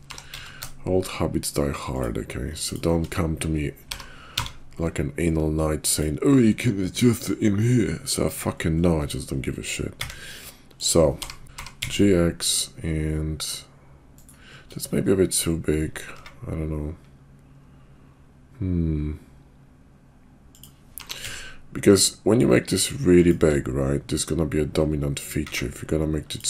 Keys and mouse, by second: 0.0 g, 2.5 shift+click, 10.0 s, 11.1 h, 11.1 g, 11.5 ctrl+z, 11.5 g, 16.1 s, 21.0 g, 25.4 s.